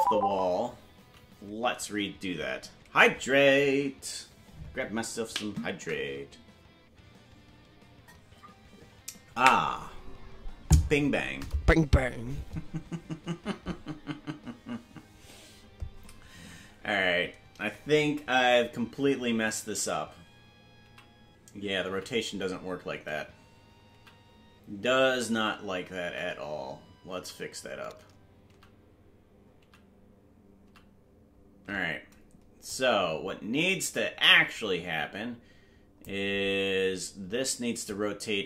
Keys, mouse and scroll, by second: 21.6 ctrl+z, 22.4 ctrl+z, 32.6 ctrl+z, 32.6-36.0 drag, 37.8-38.4 drag.